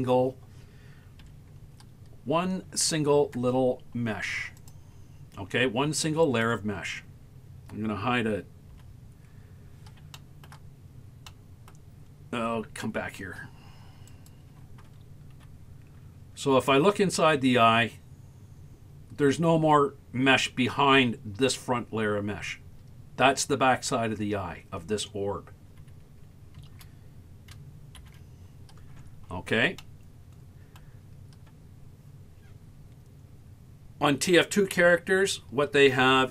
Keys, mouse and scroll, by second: 1.3 Tab, 1.9 scroll up 1, 4.6 click, 6.3 right click, 8.7 h, 9.5-10.0 scroll up 1, 10.0 scroll up 1, 10.1 shift+middle click, 10.9 scroll up 2, 11.3 middle click, 11.9-13.6 scroll down 10, 14.1 right click, 15.4 KP_Decimal, 16.4-17.1 scroll down 4, 24.9-26.6 scroll down 5, 28.0 alt+h, 28.6-29.4 scroll down 11, 29.9 middle click.